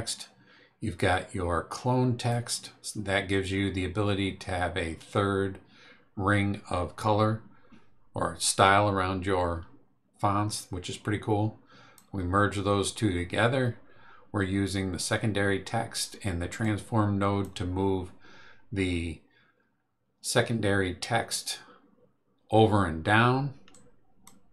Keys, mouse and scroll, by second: 10.5-12.1 drag, 16.6-17.6 drag, 23.7 click.